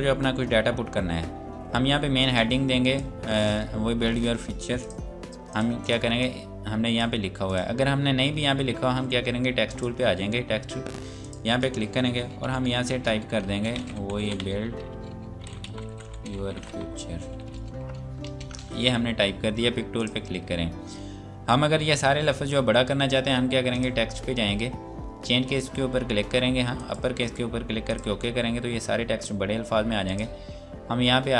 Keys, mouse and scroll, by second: 0.8 scroll down 1, 2.4 click, 7.8 scroll up 1, 9.7 click, 12.5-17.8 typing, 15.1 Return, 18.2 ctrl+space, 20.0 click, 23.7 click.